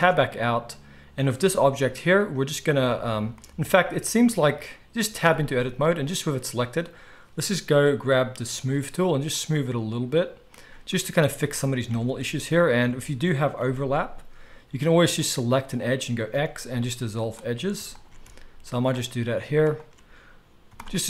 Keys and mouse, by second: 0.0 Tab, 1.4 g, 2.9 Tab, 5.2 a, 8.7 middle click, 9.3-12.6 drag, 11.9 alt+a, 12.6-19.6 alt+shift+middle drag, 13.5 g, 16.3 x, 18.2 x, 19.6 alt+shift+click, 19.7-21.0 alt+shift+middle drag, 20.6 x.